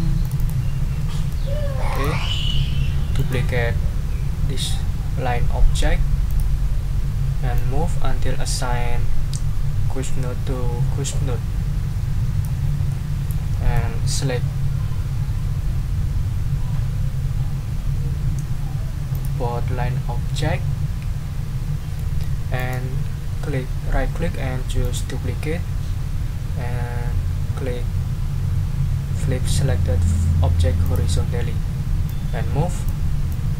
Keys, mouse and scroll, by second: 0.2 click, 1.0 middle click, 1.9 ctrl+click, 2.4 ctrl+scroll up 2, 3.2 ctrl+right click, 6.3 click, 7.5-12.6 drag, 12.9 click, 13.3 right click, 19.1 shift+click, 22.0 click, 22.6 right click, 24.8 click, 30.8 click, 32.0-33.0 drag, 33.3-33.5 drag.